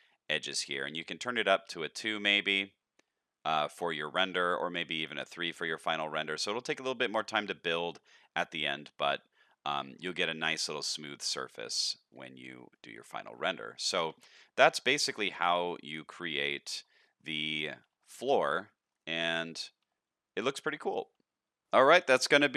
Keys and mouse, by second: 3.5 click, 5.1 click, 6.6 click, 8.5 middle click, 9.6 shift+middle drag, 10.9 shift+middle drag, 11.7-12.1 shift+middle drag, 12.7 shift+middle drag, 13.1-13.4 middle drag, 14.1 alt+a, 14.3-14.9 middle drag, 15.1-15.9 middle drag, 16.4-16.7 shift+middle drag, 17.0 middle click, 17.5 shift+middle drag, 18.4-18.9 middle drag, 19.2 click, 19.6 shift+middle click, 21.7 middle click.